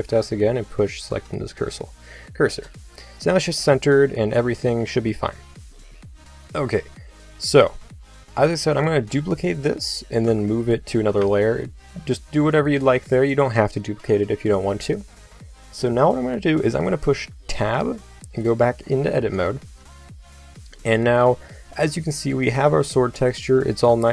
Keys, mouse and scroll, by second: 8.8 shift+d, 10.2 m, 12.1 click, 17.5 Tab, 22.3-23.9 middle drag.